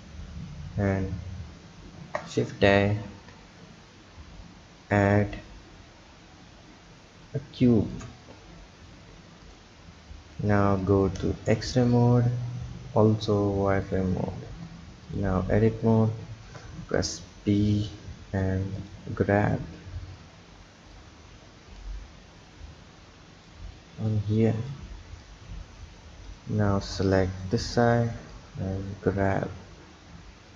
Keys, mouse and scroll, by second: 0.6-1.9 scroll up 5, 1.9 shift+a, 3.0 shift+a, 8.8 s, 10.8-11.6 drag, 11.6-12.3 scroll up 3, 12.3-13.1 scroll up 2, 13.8 click, 14.5 Tab, 15.0 click, 16.6 b, 18.7-21.0 drag, 24.7 click, 25.5-26.3 scroll up 3, 26.3 click, 26.6 b, 28.3 click.